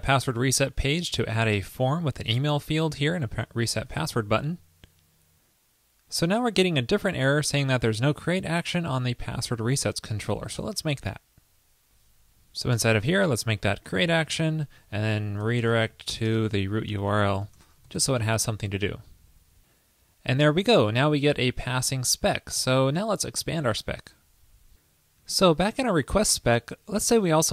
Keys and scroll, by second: 0.5 super+a, 1.1 super+v, 4.1 super+s, 18.2 super+s.